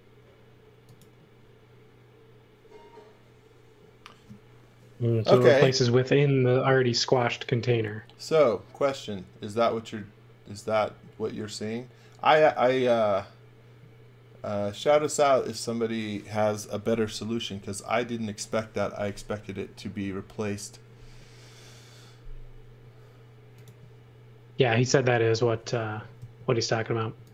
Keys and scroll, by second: 24.8 space, 26.2 super+z.